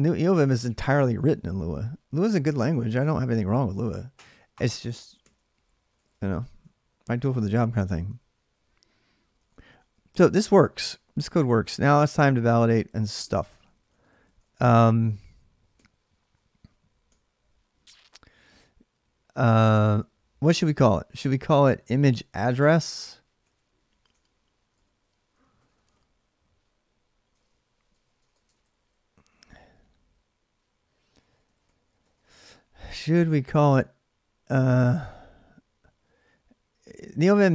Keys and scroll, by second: 3.3 alt+Tab, 5.0 ctrl+c, 5.3-6.3 typing, 8.0 ctrl+a, 8.0 BackSpace, 8.2 ctrl+a, 9.2 ctrl+[, 9.3 typing, 10.7 ctrl+[, 11.3 ctrl+[, 11.4 ctrl+j, 11.5-16.0 typing, 20.3-28.5 typing, 30.8-33.4 typing, 35.5-36.4 typing.